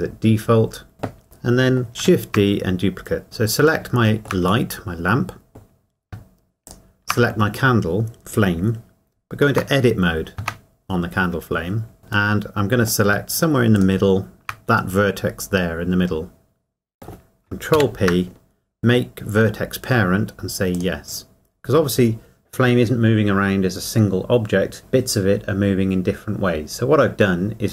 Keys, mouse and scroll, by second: 1.2 middle click, 3.2 click, 3.9 shift+middle click, 4.7 middle click, 7.1 shift+click, 10.4 Tab, 12.3 middle click, 14.5 shift+click, 15.0 middle click, 17.0 scroll up 1, 18.0 ctrl+p, 20.7 click.